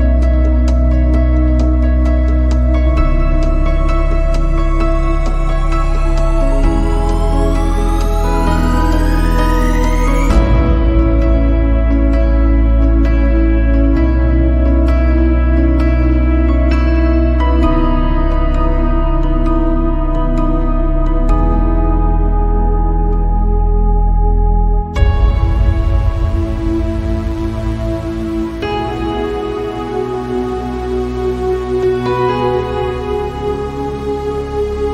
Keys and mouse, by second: 4.6 shift+middle click, 6.1 shift+middle click, 8.3 click, 10.8-13.5 drag, 14.6 click, 14.6-15.2 middle drag, 17.0 shift+middle click, 18.0 click, 18.6-19.3 drag, 20.3 click, 21.4 click, 22.4-25.5 drag, 25.7 ctrl+z, 26.7 shift+middle drag, 30.4 click, 31.8 ctrl+z, 33.3 click.